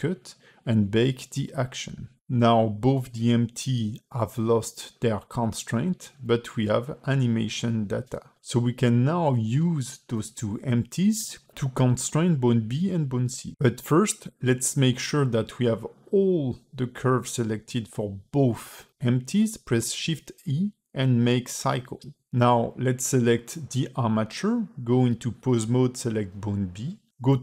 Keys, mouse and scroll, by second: 0.3 q, 4.5 click, 5.5 click, 6.6 click, 7.1 click, 8.2 shift+click, 9.7 click, 10.9 click, 12.3 click, 12.8-13.3 scroll down 7, 13.4 a, 20.4 shift+e, 23.0 click, 24.1 click, 25.5 click, 26.4 ctrl+Tab, 26.6 click.